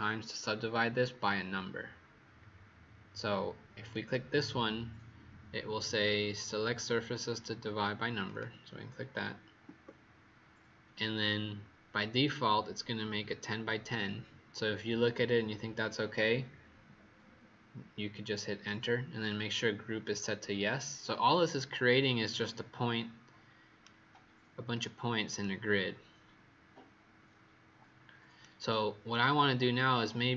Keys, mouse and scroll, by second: 9.6 Return, 22.2 right click, 24.7 click, 25.3 right click.